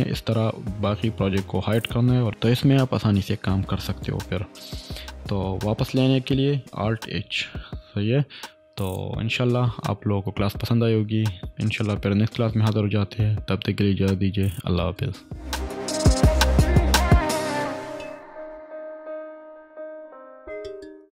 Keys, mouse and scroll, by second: 5.4 click, 5.9-6.6 typing, 7.2 alt+h, 8.8 click, 10.5-11.6 typing.